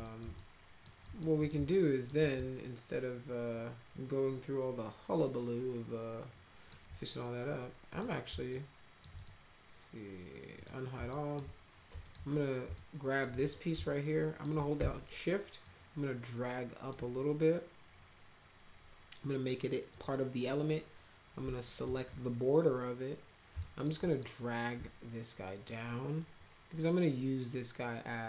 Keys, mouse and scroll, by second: 0.0 middle click, 0.3 alt+middle click, 1.0 middle click, 1.4 click, 1.7 alt+middle click, 2.3-6.6 alt+middle drag, 7.8 click, 8.5 alt+middle click, 9.1 right click, 10.5 click, 11.1 alt+middle click, 12.0 alt+click, 12.7 alt+middle click, 13.4 click, 13.7 alt+middle click, 14.5 scroll down 2, 15.6-16.9 shift+drag, 19.9 click, 21.8 ctrl+click, 23.6 alt+middle click, 23.9 middle click, 25.6-28.2 shift+drag.